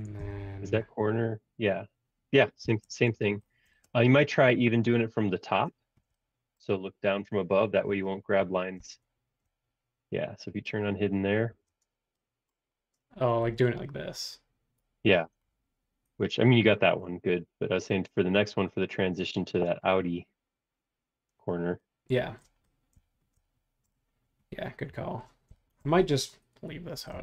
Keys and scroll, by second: 2.6 shift+g, 3.1 space, 7.8 super+1, 11.5 shift+g.